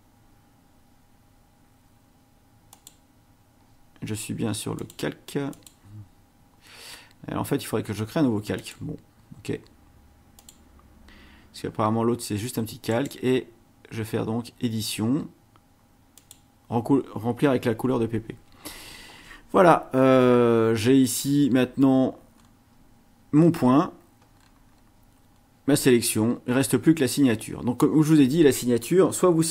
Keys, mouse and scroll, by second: 2.7 click, 4.8 click, 5.5 click, 8.6 click, 10.4 click, 12.9 right click, 16.2 click, 18.5 ctrl+shift+a, 20.0 ctrl+scroll down 2, 20.8-21.2 ctrl+scroll down 2, 21.4 ctrl+scroll down 2, 22.4-22.7 scroll up 2, 23.4 scroll down 2, 24.3-25.6 scroll down 4, 25.6-26.0 scroll up 2, 26.3 scroll down 2.